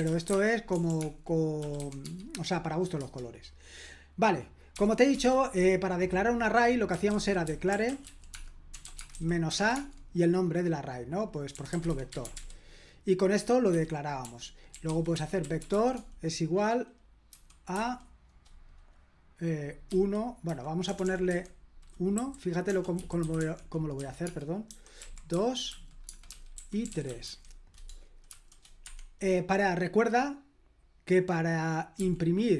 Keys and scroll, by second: 0.0-2.3 typing, 3.0 Return, 4.7-5.1 typing, 6.7-10.0 typing, 11.3-12.8 typing, 13.7 Escape, 14.0-16.2 typing, 17.3-17.7 typing, 19.9-20.9 typing, 22.2-28.3 typing, 28.8 Escape, 32.0 typing.